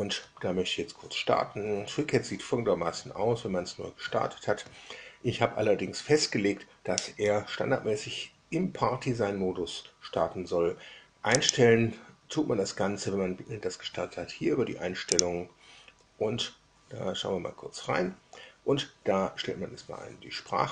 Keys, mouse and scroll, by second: 11.3 click, 15.1 click.